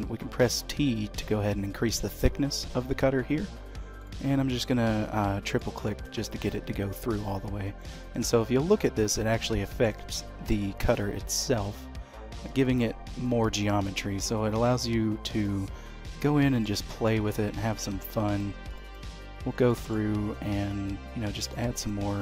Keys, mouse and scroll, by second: 7.4-7.9 scroll up 2, 7.8 middle click, 10.1 shift+middle click, 10.8 middle click, 15.3 click, 16.2 shift+middle click, 17.2 click, 19.7 shift+middle click, 20.8 click.